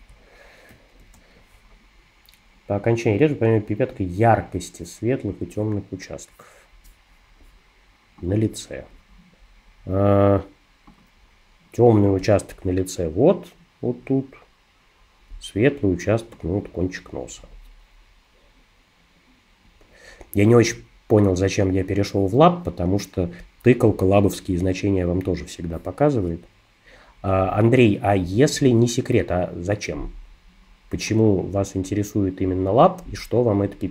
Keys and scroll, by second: 1.0 super+=.